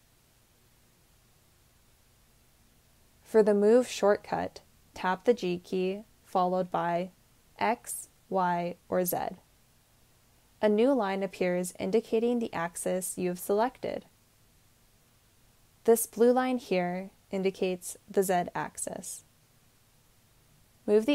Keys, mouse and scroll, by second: 4.6 g, 7.9 x, 7.9 y, 7.9 z.